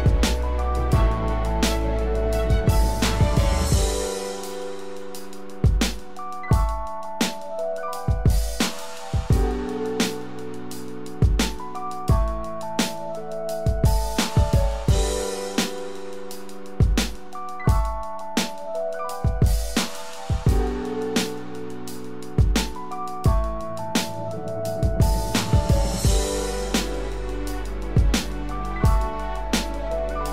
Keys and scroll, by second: 0.4 ctrl+-, 23.4 ctrl+=.